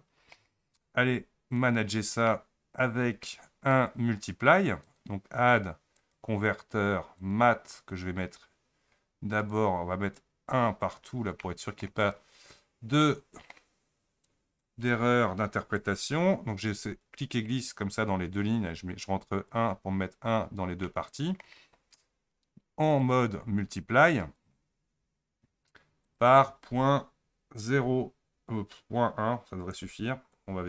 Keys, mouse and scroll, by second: 19.0-30.6 drag.